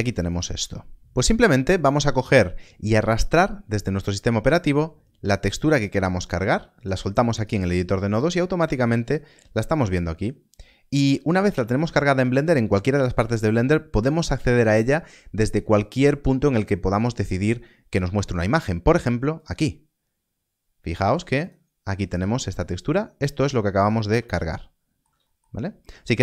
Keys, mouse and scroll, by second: 0.2 click, 1.0 middle click, 3.1 middle click, 19.3 click, 21.4 click, 22.3 scroll down 1, 24.3 ctrl+middle click.